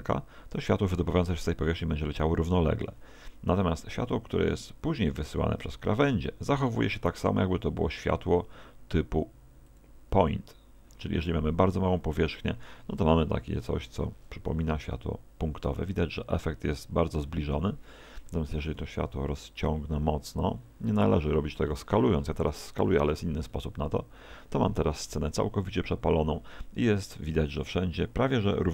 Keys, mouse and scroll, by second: 0.1 click, 6.7 s, 9.8 click, 18.3 Escape, 21.7 click.